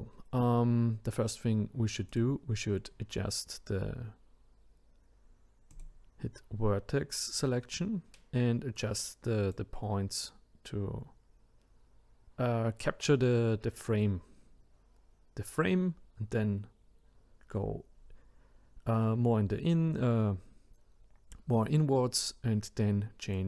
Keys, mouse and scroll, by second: 2.1 click, 5.7 click, 23.2 click.